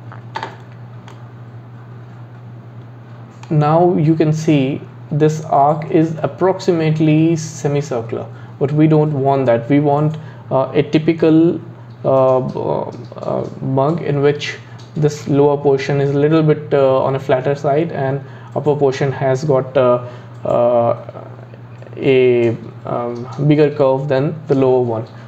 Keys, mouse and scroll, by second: 0.7-1.1 scroll down 3, 1.1-4.1 middle drag, 13.6-16.3 scroll up 2, 16.3 scroll up 1.